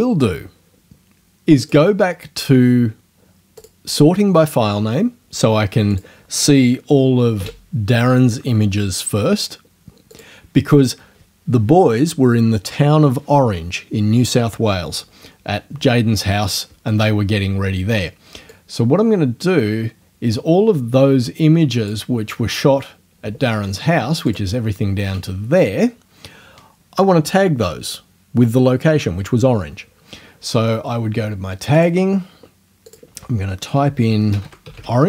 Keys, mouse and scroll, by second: 1.6 click, 3.6 click, 5.9 click, 7.4 g, 10.2 click, 18.5-22.1 drag, 24.3 shift+click, 31.8 click, 32.9 click, 33.6-35.0 typing.